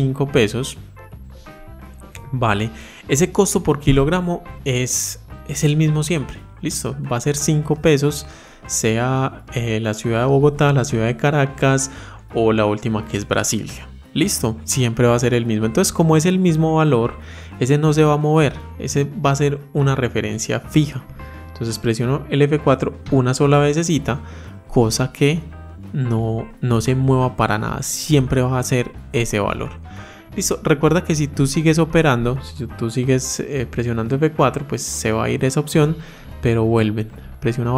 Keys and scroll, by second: 22.7 F4, 33.4 F4.